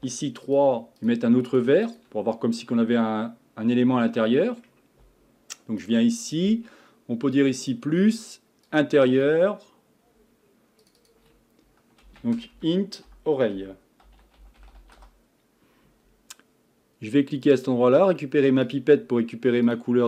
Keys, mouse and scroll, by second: 0.0 3, 0.4 click, 1.0 shift+click, 1.5 shift+click, 1.9 shift+click, 2.4-5.4 middle drag, 5.9 drag, 7.6-10.9 drag, 14.0 click, 17.4 click.